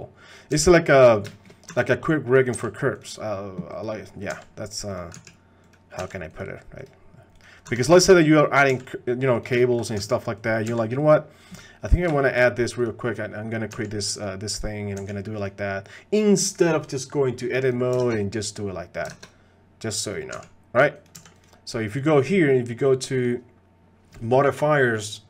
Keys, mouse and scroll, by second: 0.5 g, 1.3 shift+click, 1.7 r, 2.6 g, 3.7 click, 4.3 g, 5.1 s, 6.0 g, 7.4 click, 7.6 r, 8.7 g, 9.6 shift+middle click, 10.0 s, 10.7 g, 12.1 shift+click, 13.5 click, 14.2 click, 14.2 g, 15.0 g, 17.6 click, 18.1 ctrl+Tab, 19.2 ctrl+Tab, 20.1 click, 20.3 s, 21.1 g, 23.2 click.